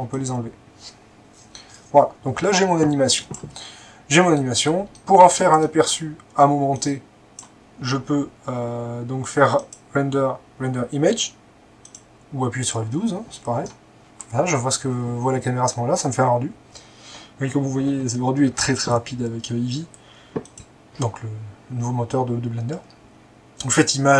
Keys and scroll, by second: 4.8-5.5 typing.